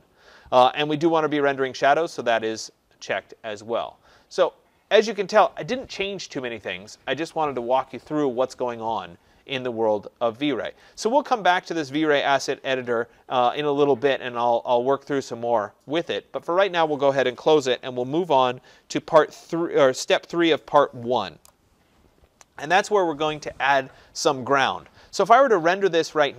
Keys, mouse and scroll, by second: 10.9-16.0 drag, 17.7-22.8 drag, 26.1 click.